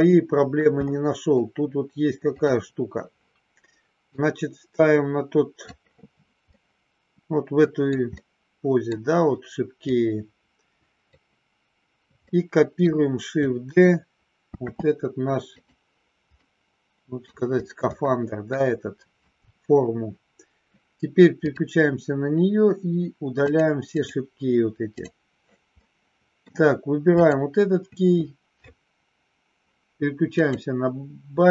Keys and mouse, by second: 0.7 middle click, 2.4 click, 4.1-5.8 drag, 6.4-7.8 middle drag, 8.1 middle click, 9.8-11.1 drag, 12.2 middle click, 14.6 shift+d, 16.5 middle click, 18.0 middle click, 21.5 click, 23.5 click, 23.9 click, 24.9 click, 25.9 middle click, 30.3 click.